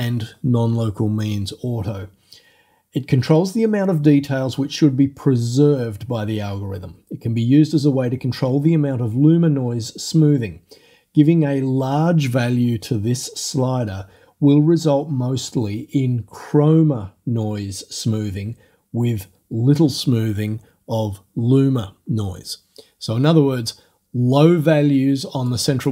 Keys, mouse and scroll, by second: 25.5 click.